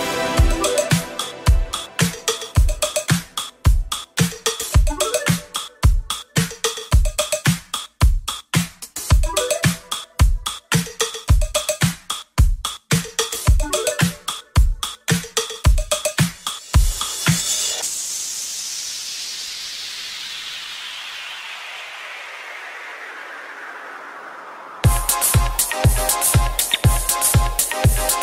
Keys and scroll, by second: 2.2 v.